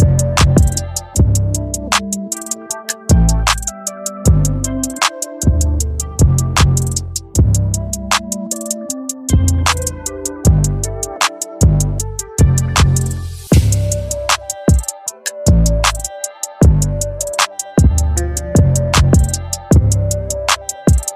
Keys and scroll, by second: 12.0 ctrl+d, 16.7 ctrl+t.